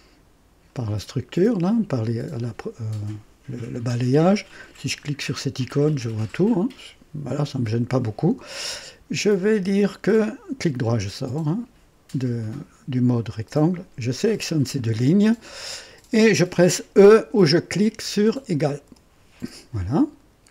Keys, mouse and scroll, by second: 4.5 click, 6.5 click, 10.1 right click, 12.1 click, 14.0 click, 18.8 e.